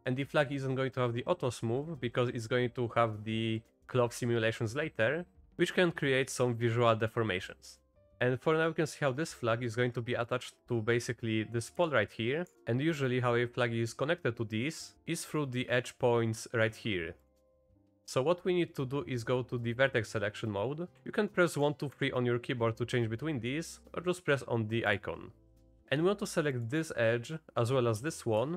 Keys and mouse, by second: 3.6-3.9 middle drag, 8.1 g, 8.3 click, 10.3 click, 11.8 g, 17.5 h, 17.9 Tab, 17.9 1, 21.5 2, 21.9 3, 24.9 click, 26.5 click, 28.1 shift+click.